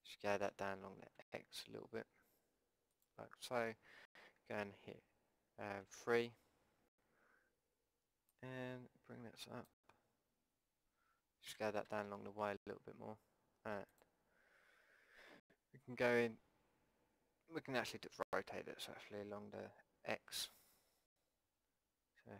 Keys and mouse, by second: 0.4 s, 5.8 KP_3, 8.3-10.3 drag, 11.5 s, 18.2 r.